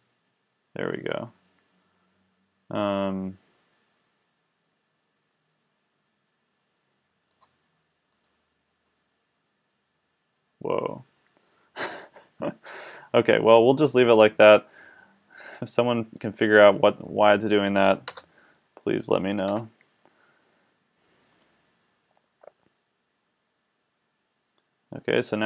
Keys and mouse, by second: 0.1 click, 9.8 click, 15.0-17.7 drag, 18.1 KP_0, 19.5 KP_0.